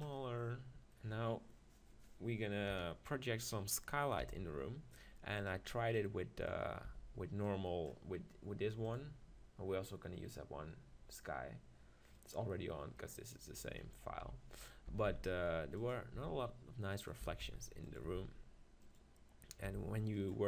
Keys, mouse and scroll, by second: 2.7 KP_7, 3.8-5.0 middle drag, 4.2 g, 5.5-7.4 drag, 6.1 middle click, 6.8 z, 7.4 middle click, 7.6 click, 7.7 middle click, 14.2 KP_1, 14.9 s, 15.9-20.4 drag, 16.2 g, 17.2 s, 18.0 g, 19.7 g.